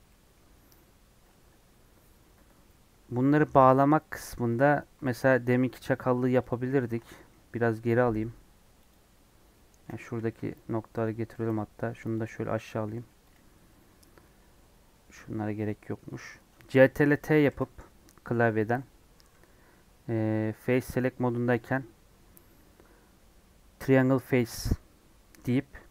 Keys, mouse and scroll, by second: 0.0-1.0 middle drag, 1.0 scroll down 1, 4.2 scroll up 1, 6.4 alt+shift+click, 8.8 x, 9.4 middle click, 9.9 1, 10.2 middle click, 10.5-10.9 scroll up 1, 10.9 click, 11.3 g, 12.5 a, 13.3 m, 14.0 scroll down 1, 14.2-16.4 middle drag, 16.4 scroll down 1, 17.5 ctrl+t, 19.3 3.